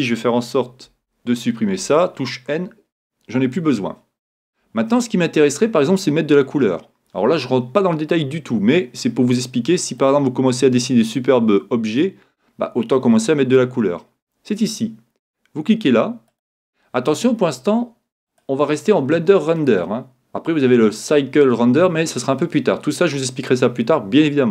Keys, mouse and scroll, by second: 0.9 n, 10.0-11.9 middle drag, 16.3-18.1 drag, 18.3-20.1 drag.